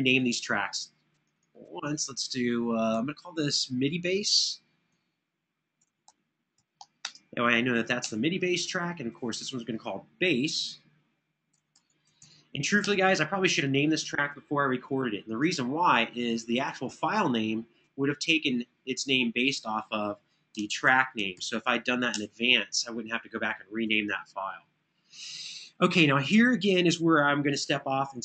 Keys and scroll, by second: 2.7 Right, 4.0 Left, 4.1 Left, 4.4 Left, 5.4-7.1 typing, 7.8 Return, 11.1-12.6 typing, 12.6 Return, 20.1-21.6 typing, 22.0 Return.